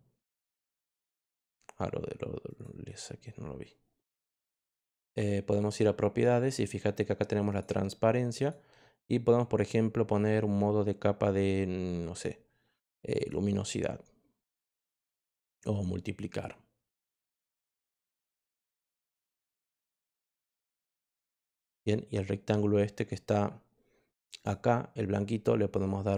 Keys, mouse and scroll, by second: 0.9 click, 4.4 click, 4.9 click, 5.5 click, 7.4 click, 8.3 click, 13.1 click, 14.8 click, 18.5 click, 19.8 click, 21.5 click, 24.3 click.